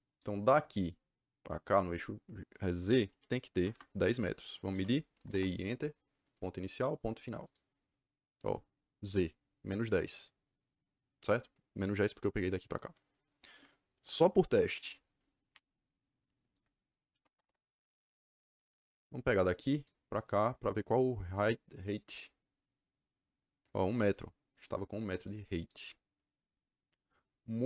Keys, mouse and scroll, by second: 3.5 Escape, 3.6 Escape, 4.6 d, 5.1 i, 5.2 Return, 6.3 click, 7.3 click, 16.8-17.8 typing, 19.7 click, 22.0 click, 25.1 click, 25.5 click.